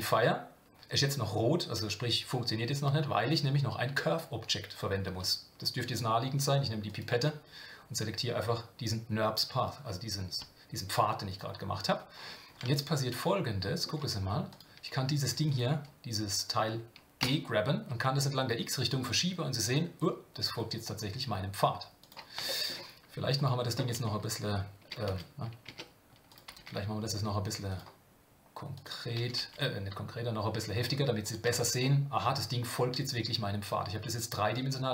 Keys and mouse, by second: 6.8 click, 12.9-13.8 shift+middle drag, 14.5 click, 15.5-22.4 drag, 22.4 shift+middle click, 23.4-25.7 drag, 25.7 Tab, 26.3 click, 26.5 g, 28.7 click, 29.1 g, 31.4 Tab, 31.8-34.9 middle drag.